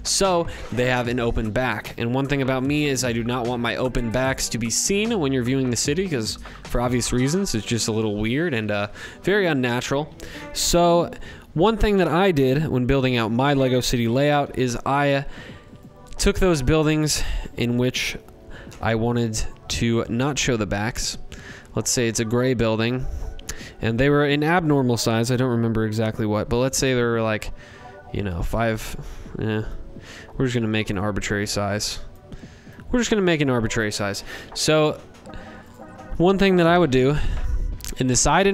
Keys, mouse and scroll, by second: 13.4 m, 16.0 click, 16.0 m, 19.0 click, 20.0 click, 21.8 click, 23.2 click, 25.8 4, 27.5 click, 29.8 click, 31.1 click, 32.3 click, 32.6 click, 33.6 click, 34.6 click, 36.8 click, 37.7 ctrl+z.